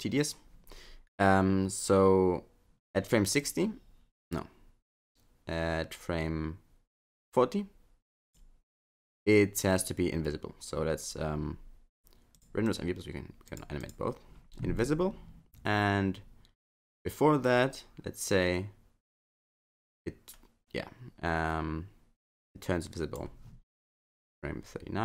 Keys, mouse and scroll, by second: 3.4 click, 12.4 click, 12.7 click, 13.5 click, 13.8 click, 16.7 click.